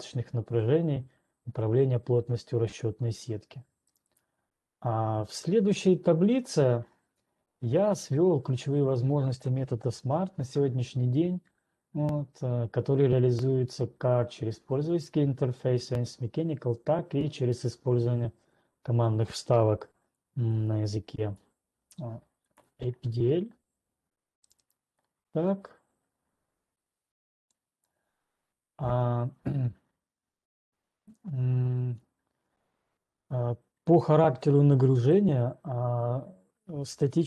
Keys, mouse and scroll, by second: 1.4-4.9 scroll, 4.9 right click, 4.9-5.2 scroll, 6.0 scroll, 6.6 scroll, 7.2 scroll down 3, 8.0-9.3 scroll down 7, 10.8-11.6 scroll, 20.8 ctrl+2, 20.8 scroll, 24.8 right click, 25.3 right click, 26.8 ctrl+2, 27.3 ctrl+2, 27.3 right click, 28.3 ctrl+2.